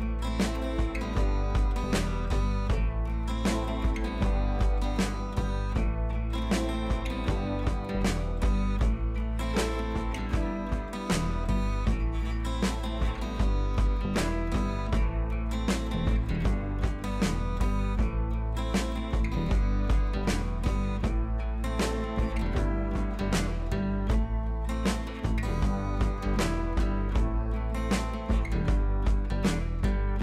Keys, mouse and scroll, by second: 5.8 click, 6.7 ctrl+z, 8.1 ctrl+h, 8.6 scroll up 1, 10.5 ctrl+j, 11.1 click, 13.1 click, 13.7 ctrl+z, 15.8 click, 16.1 scroll down 1, 17.3 click, 20.3 click, 20.7 ctrl+d, 21.0 scroll up 2, 21.1 v, 21.3-23.1 drag, 23.3-23.6 scroll down 1, 24.1 ctrl+t, 24.8-25.6 alt+drag, 29.5 ctrl+t, 29.7-30.2 drag.